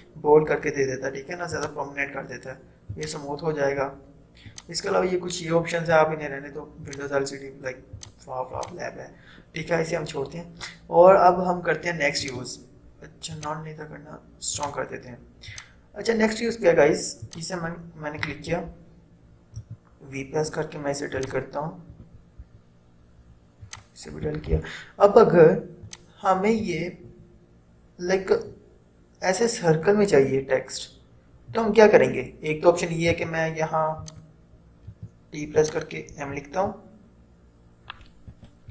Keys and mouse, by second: 1.6 click, 6.9 click, 12.3 click, 18.4 ctrl+0, 19.8 v, 21.2 click, 22.0 Delete, 23.7 click, 23.8 click, 24.2 Delete, 26.0-29.2 drag, 33.2 v, 34.1 click, 35.1 t, 35.7 click, 38.4 BackSpace.